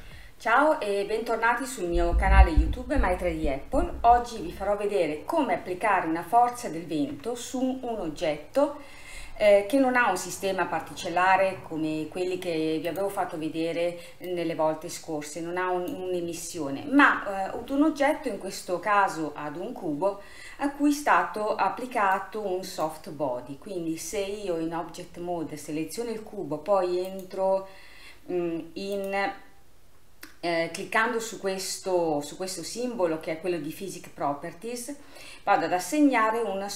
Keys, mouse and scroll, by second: 7.2 KP_1, 12.9-14.5 drag, 16.5-17.3 middle drag, 17.3-20.3 scroll up 2, 22.2-32.0 drag.